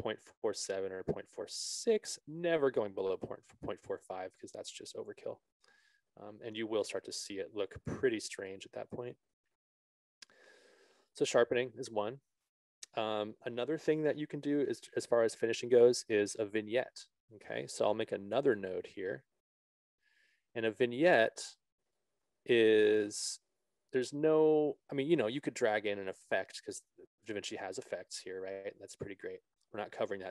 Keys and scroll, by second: 9.7 ctrl+z.